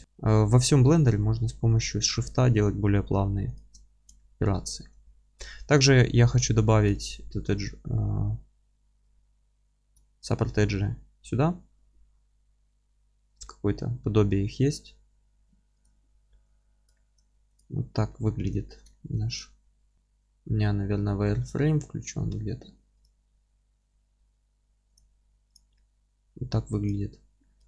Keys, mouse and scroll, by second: 3.5 shift+click, 3.9 scroll down 1, 4.2-6.8 alt+middle drag, 5.0 Tab, 6.0 Tab, 6.4 2, 6.9 click, 8.9 scroll up 1, 9.1-17.6 alt+middle drag, 10.0-10.5 scroll up 1, 10.7-13.4 scroll down 1, 15.8 q, 16.3 Tab, 16.7 scroll down 1, 17.6 click, 18.1-19.3 middle drag, 18.3-18.9 scroll down 1, 19.3 click, 19.6-19.9 middle drag, 19.9-25.5 drag, 25.7-26.8 alt+middle drag, 26.8 click, 27.2-27.6 scroll up 2, 27.4-27.6 middle drag.